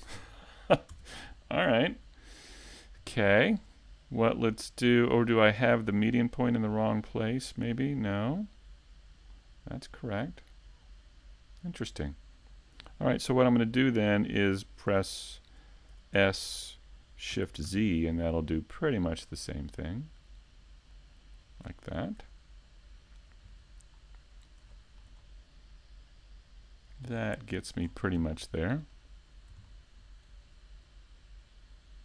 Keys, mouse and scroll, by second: 0.0 e, 0.3 click, 7.8 click, 8.5 Tab, 9.2 click, 11.7 middle click, 12.5-12.8 scroll down 5, 12.8 shift+middle click, 13.3-13.8 scroll up 3, 13.7 middle click, 15.4 click, 19.2 Tab, 19.5 middle click, 21.1 middle click, 22.0 middle click, 22.3-22.7 scroll up 2, 22.7 middle click, 23.1 ctrl+Tab, 27.2 c, 30.0 middle click.